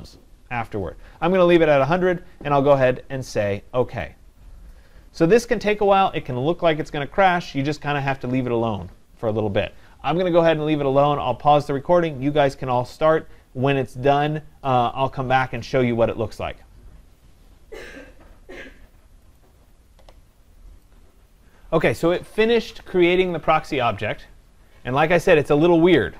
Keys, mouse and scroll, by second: 4.1-9.1 drag, 25.3-25.6 scroll down 3.